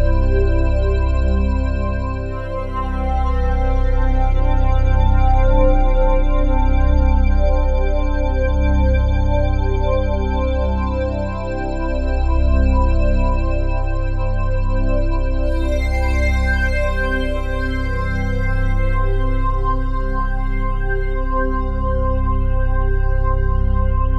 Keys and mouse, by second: 0.7 alt+click, 1.6 alt+click, 2.2 alt+click, 3.2 1, 4.2-6.5 drag, 6.7 alt+click, 8.1-10.4 drag, 10.8 alt+click, 12.6 click, 12.6 typing, 13.9-14.6 typing, 15.8 click, 16.0 click, 17.1 alt+click, 18.0 ctrl+alt+click, 19.6 click, 20.7 click, 21.4 click, 23.0 alt+click, 23.7 ctrl+alt+click.